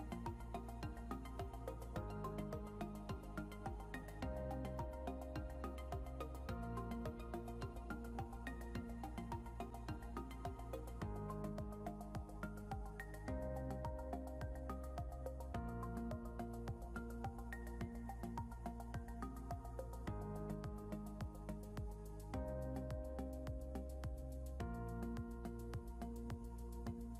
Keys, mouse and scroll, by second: 2.8 scroll down 1, 6.6 scroll up 1, 7.6-8.4 scroll up 1, 10.8 scroll, 11.6 double click, 12.0 scroll up 1, 14.8 double click, 16.6 scroll down 1, 19.9 scroll up 1, 20.7 scroll up 1, 22.4 scroll, 22.8 scroll down 1, 24.1 scroll up 1.